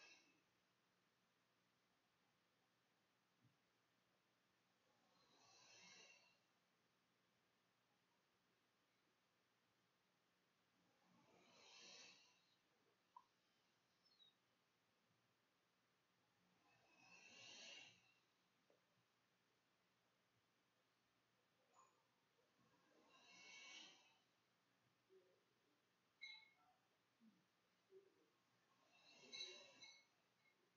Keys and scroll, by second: 0.2 `, 0.3 Tab, 3.7 ctrl+x, 4.6 ctrl+v, 5.6-9.5 typing, 12.0 Tab, 14.0 `, 16.5-20.7 typing, 21.7-23.6 typing, 24.6 w, 25.5 Tab, 29.5-30.7 typing.